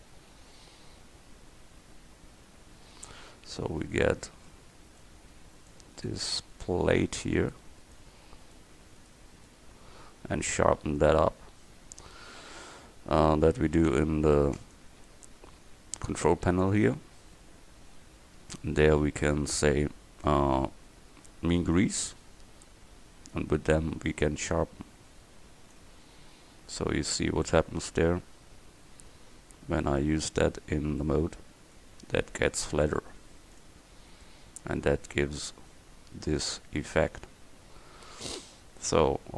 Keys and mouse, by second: 4.0-13.7 drag, 14.0 b, 15.1 n, 23.4-26.1 drag, 26.1 Tab, 33.6-36.2 drag.